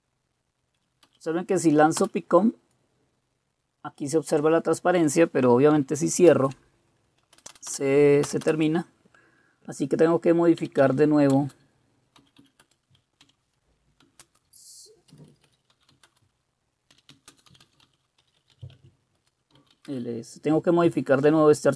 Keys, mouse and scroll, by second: 1.2 Up, 2.0 Return, 6.3 ctrl+c, 7.4 Return, 7.5 Return, 7.7 Return, 8.2 Return, 8.4 Return, 10.4-20.2 typing, 12.6 Return.